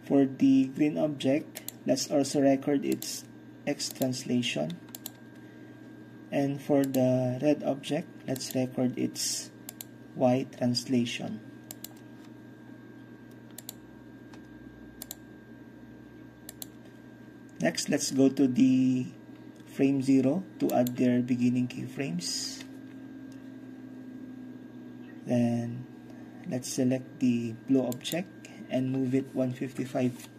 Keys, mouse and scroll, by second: 2.2-3.3 scroll down 1, 4.0-5.4 drag, 5.4-6.8 middle drag, 5.4-6.8 scroll down 3, 6.8-8.5 scroll down 1, 6.9-7.8 middle drag, 8.5-8.8 middle drag, 8.5-9.8 scroll down 1, 8.9-9.8 middle drag, 9.8-10.7 scroll down 1, 9.9-10.7 middle drag, 10.7 scroll down 1, 10.8 middle click, 12.0-13.7 drag, 12.8-13.7 scroll up 1, 13.7-16.6 scroll up 1, 13.8-15.1 drag, 15.2 click, 15.3-17.3 middle drag, 16.6-17.3 scroll up 1, 17.3-18.8 drag, 17.3 scroll up 1, 20.8-30.3 drag.